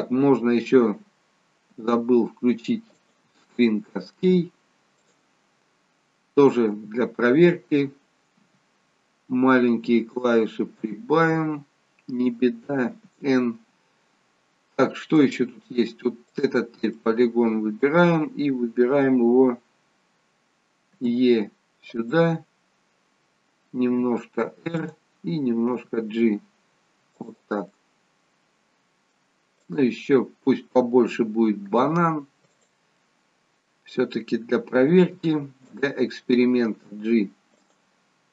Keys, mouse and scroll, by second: 12.9 n, 14.2-15.0 scroll down 1, 15.2 middle click, 15.2-16.3 scroll down 2, 16.3 click, 16.9 middle click, 20.9 e, 23.9 r, 25.8 g, 27.7 middle click, 29.6 click, 31.6 e, 32.9 middle click, 35.0 r, 36.7 g.